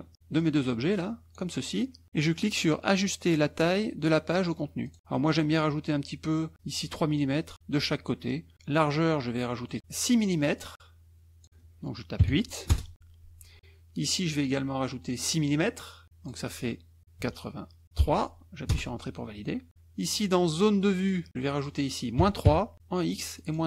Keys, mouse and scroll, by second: 0.4-1.5 drag, 4.9 click, 8.8 click, 10.6-11.7 drag, 12.7 Return, 16.1 click, 18.0 KP_3, 18.7 Return, 20.6 click, 21.0 click, 21.8-22.7 scroll up 1, 22.2 KP_Subtract, 22.7 click.